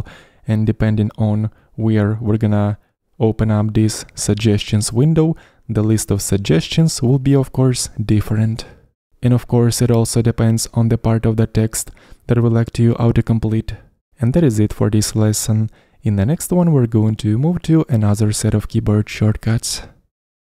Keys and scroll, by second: 7.2-8.0 typing.